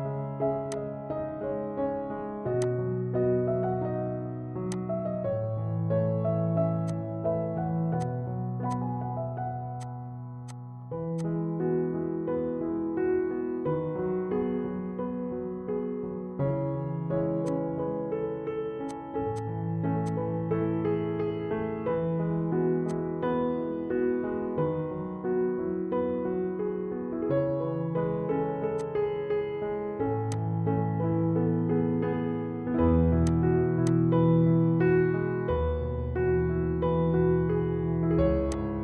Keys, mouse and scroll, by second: 2.8-7.9 drag, 2.8 typing, 9.8-12.6 drag, 13.2 Tab, 14.4 Tab, 17.5-18.9 drag, 18.9 click, 22.8 click, 24.6 Tab, 26.1 Tab, 26.7 Tab, 28.8 click, 32.0 scroll down 1, 33.3-36.6 drag, 36.6 ctrl+g, 37.7 p, 38.6 click.